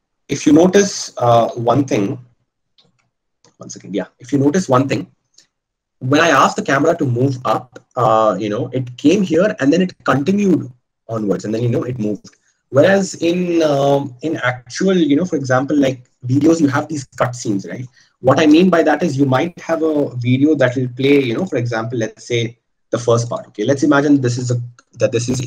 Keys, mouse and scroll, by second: 0.8 ctrl+z, 1.6 ctrl+z, 2.5 ctrl+z.